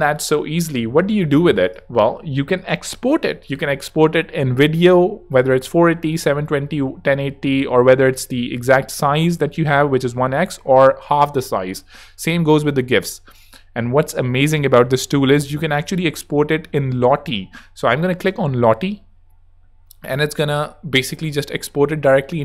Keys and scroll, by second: 0.3 super+-.